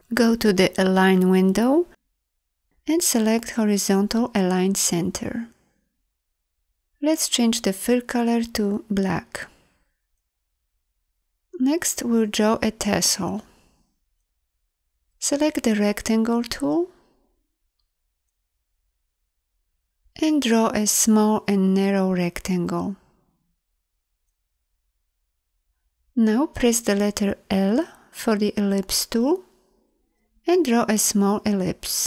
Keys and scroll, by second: 15.8 m, 28.0 l.